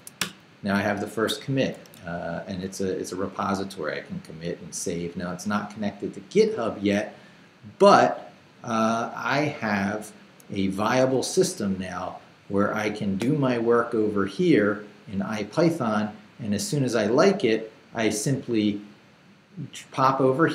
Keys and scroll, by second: 0.0-0.4 typing.